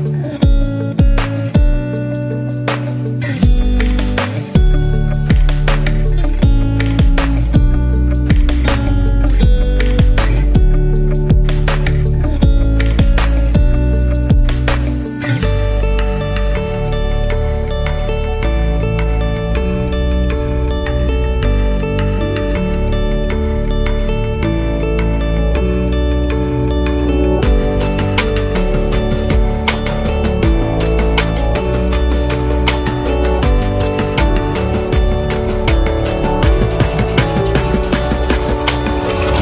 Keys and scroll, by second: 4.6 r, 6.5 z, 8.8-9.8 typing, 11.7 super+z, 17.5 z, 18.4 v, 19.4 z, 20.6 v, 25.3 z, 27.0 v, 31.5 super+-, 34.0 BackSpace, 34.9 BackSpace, 37.5 super+-, 38.3-39.4 typing.